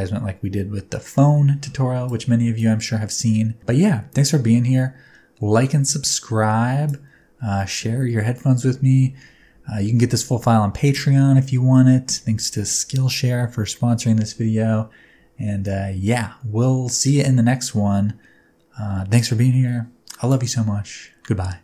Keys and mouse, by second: 2.6-6.9 drag, 15.6-20.3 drag.